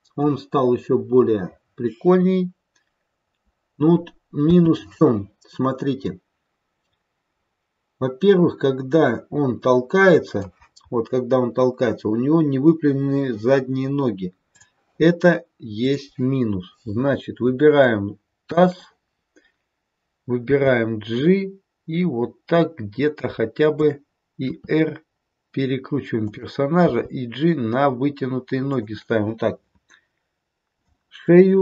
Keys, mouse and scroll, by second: 1.6-4.3 scroll down 2, 4.5 scroll down 1, 4.5 space, 6.1 click, 10.7-11.6 scroll up 7, 11.6-12.2 scroll down 1, 12.2-14.3 scroll down 1, 14.5 click, 15.8 click, 17.7 shift+click, 19.0-20.4 scroll down 1, 20.4 g, 24.6 r, 26.8 g.